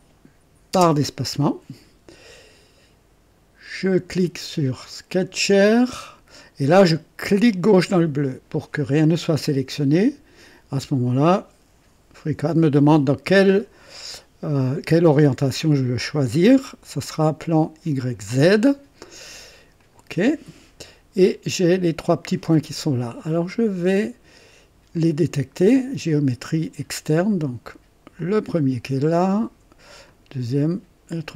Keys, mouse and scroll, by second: 0.7 space, 0.8 space, 5.4 click, 7.5 click, 11.0 click, 18.0 click, 19.8 click, 20.8-21.5 right drag, 21.0 click, 25.7 click, 28.2 click, 30.0 click.